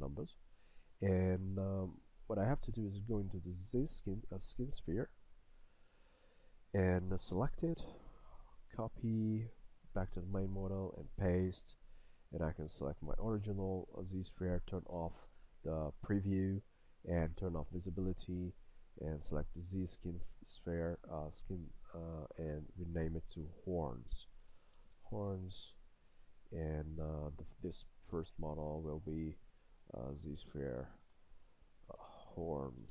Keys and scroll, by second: 15.0 a, 25.7 Return, 31.1 BackSpace.